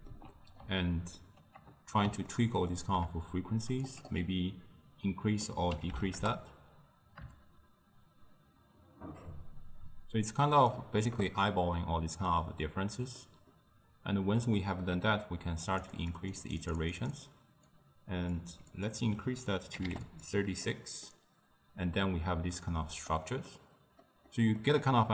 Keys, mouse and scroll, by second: 2.3-3.9 ctrl+middle drag, 3.9-7.0 drag, 7.4-10.5 shift+drag, 11.8-15.7 middle drag, 15.7-20.3 drag, 21.1-25.1 middle drag.